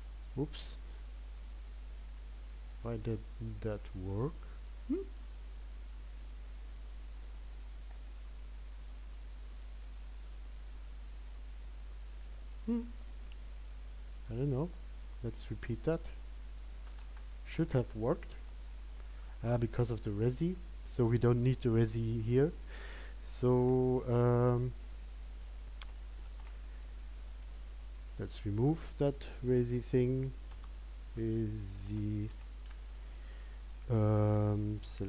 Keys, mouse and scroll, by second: 0.3 click, 26.2 click.